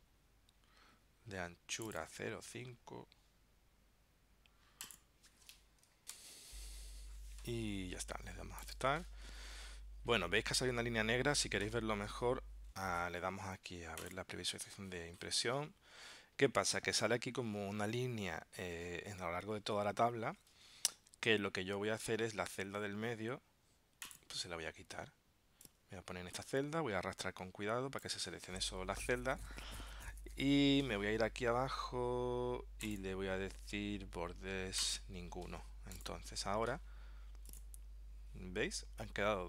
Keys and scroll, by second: 6.2 ctrl+alt+super+p.